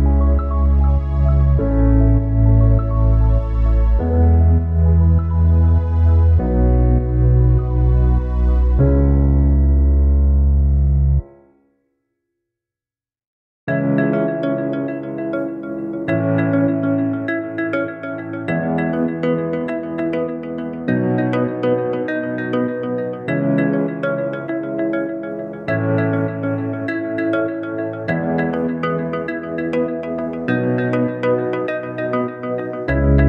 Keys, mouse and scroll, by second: 9.1 Tab, 26.9 Tab.